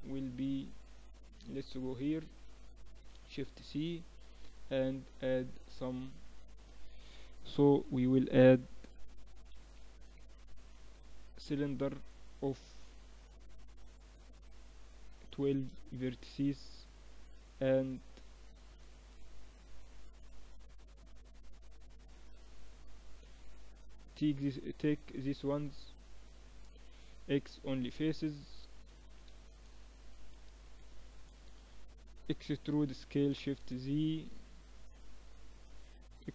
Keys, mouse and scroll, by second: 1.5-3.4 drag, 2.7 shift+c, 4.2 shift+a, 10.9-13.1 middle drag, 13.1-15.0 drag, 16.5 t, 17.3-19.0 middle drag, 17.7 Tab, 18.5 a, 19.0 click, 20.9 click, 23.1 a, 23.5-25.4 right drag, 25.4-26.5 middle drag, 26.9 x, 29.3 a, 29.9 a, 30.1 right click, 31.0 KP_1, 32.3 e.